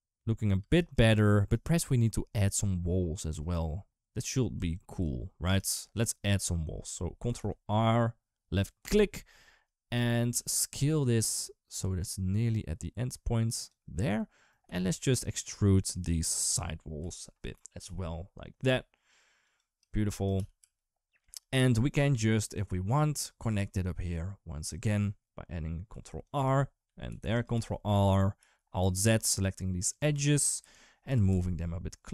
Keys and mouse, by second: 0.4 space, 0.7 click, 1.3 right click, 2.2 click, 4.4 Tab, 7.2 ctrl+r, 10.1 s, 11.8 typing, 14.5 3, 16.0 shift+click, 16.8 KP_7, 17.6 e, 19.2-20.2 typing, 25.7 ctrl+r, 26.9 ctrl+r, 28.2 alt+z, 28.9 click, 30.9 g.